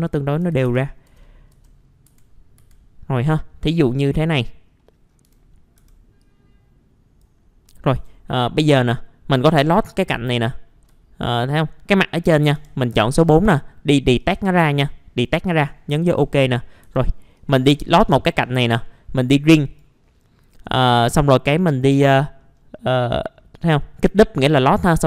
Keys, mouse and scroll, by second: 0.4 F4, 1.5 F4, 1.8 scroll down 1, 2.1 F4, 3.3 middle click, 4.2-4.8 scroll up 1, 4.8 middle click, 4.8 scroll down 1, 5.8-6.2 scroll down 1, 6.2 click, 7.4 scroll up 1, 7.5 scroll down 1, 7.6 middle click, 8.0 middle click, 8.2-8.9 scroll up 1, 9.3 click, 10.8-12.8 middle drag, 12.5 4, 12.8 click, 15.9-16.8 typing, 17.3 click, 21.2-22.4 scroll up 1, 22.4 middle click, 22.6-23.1 scroll down 1, 23.1 middle click, 23.3 scroll down 1, 23.6-24.9 scroll up 1.